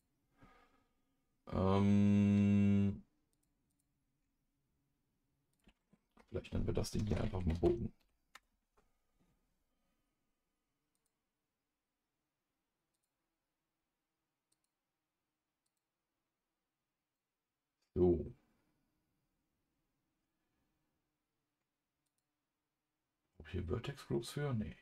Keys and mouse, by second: 6.1 F2, 11.0-13.0 drag, 14.5 click, 15.7 click, 22.1 click.